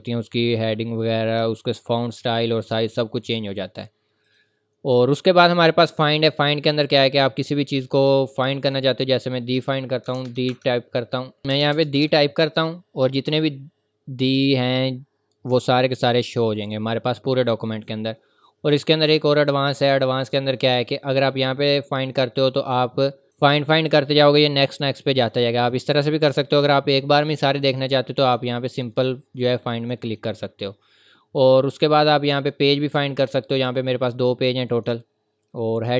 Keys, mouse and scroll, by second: 4.3 click, 7.0 click, 9.1 scroll down 1, 9.8-11.4 typing, 14.1 typing, 14.7-16.0 scroll down 1, 16.5-17.5 scroll up 1, 17.5 scroll down 1, 19.2 click, 33.1 scroll down 1, 34.0 click.